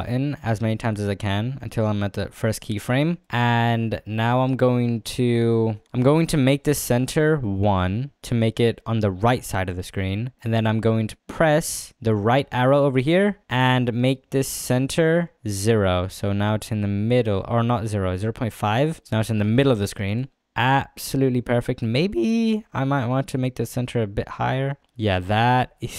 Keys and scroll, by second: 25.5 space.